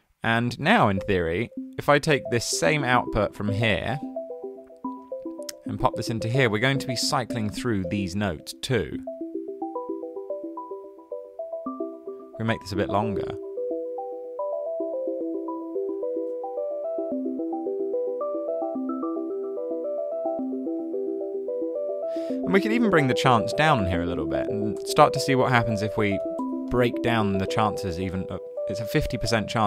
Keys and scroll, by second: 24.2-26.7 typing, 28.6-29.6 typing.